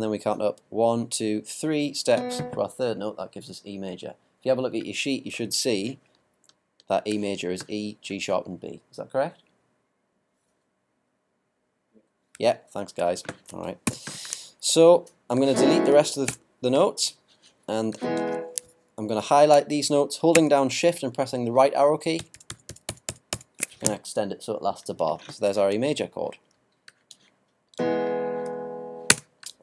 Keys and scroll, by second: 13.8 ctrl+b, 22.2 shift+Right.